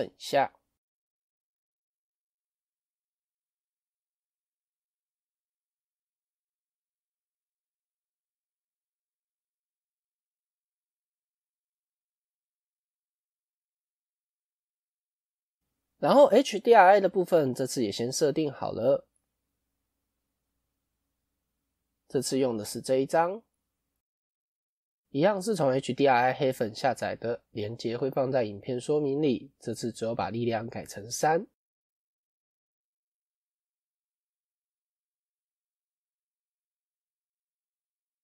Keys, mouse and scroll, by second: 4.1 n, 15.4 n, 18.5 click, 21.7 middle click, 22.4 scroll down 5, 33.5 KP_0, 35.2 scroll up 8, 35.5-36.0 scroll down 2.